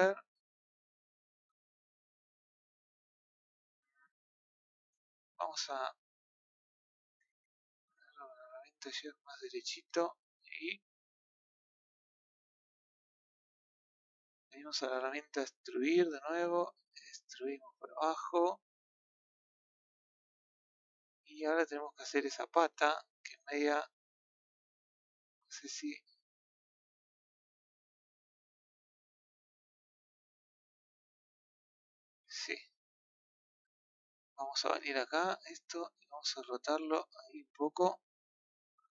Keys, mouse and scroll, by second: 1.8-3.7 scroll down 8, 3.7-4.4 scroll up 4, 4.9-6.0 scroll up 6, 6.2-7.5 scroll down 1, 7.5-8.5 drag, 11.4-12.3 scroll down 10, 12.3-15.2 scroll up 9, 15.8 click, 17.0 click, 19.7 scroll down 5, 21.1 scroll up 1, 21.2-23.6 middle drag, 24.2 click, 24.5-25.5 middle drag, 25.5 click, 26.7-27.1 scroll down 1, 27.1-28.9 middle drag, 28.9 ctrl+z, 31.3-32.4 middle drag, 32.4 KP_1, 33.9-34.2 scroll up 2, 35.7 click, 36.8 click.